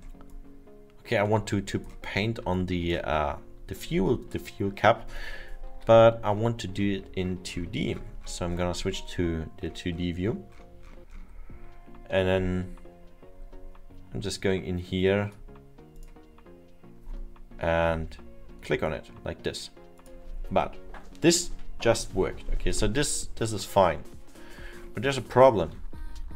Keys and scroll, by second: 5.8 F1, 17.8 ctrl+z.